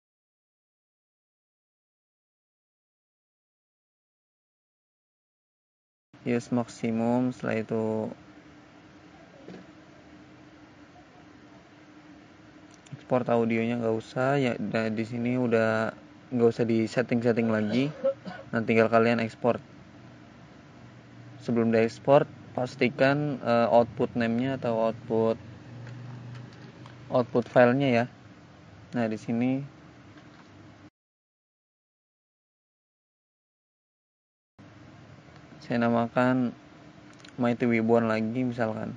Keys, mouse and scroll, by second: 1.1 click, 4.7 click, 5.6 click, 7.8 click, 13.1 click, 14.9 click, 18.1 click, 27.6 click, 28.5 click, 31.2 click, 37.3 click, 37.7 click, 37.9 double click, 38.0 double click.